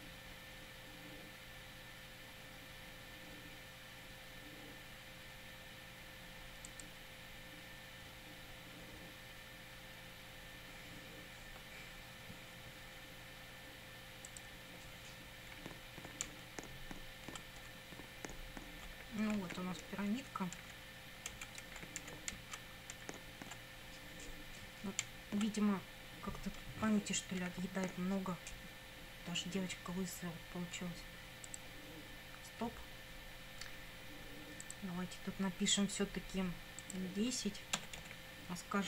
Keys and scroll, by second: 15.5 Up, 16.3 Down, 18.9 Right, 19.4 Up, 21.4 Left, 21.7 Up, 22.4 Down, 23.0 Up, 25.0 Down, 26.7 Down, 27.4 Up, 37.8 BackSpace.